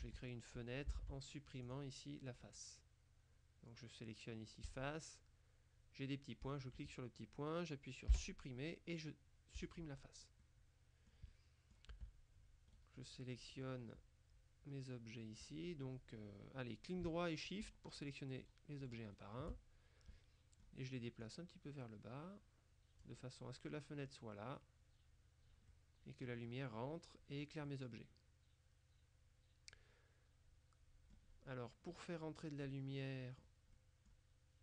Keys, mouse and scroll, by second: 0.1 Tab, 1.0 ctrl+Tab, 1.8 click, 2.4 right click, 4.8 click, 6.5 click, 8.2 Delete, 9.6 click, 10.5-11.6 drag, 12.0 Tab, 12.8 right click, 14.0-16.0 middle drag, 17.7-19.8 shift+right drag, 20.2-21.2 middle drag, 21.3-23.6 drag, 25.8-26.8 middle drag, 27.8 middle click, 28.5 click, 28.9 middle click, 29.4 click, 30.0-31.7 middle drag, 32.0-34.0 middle drag.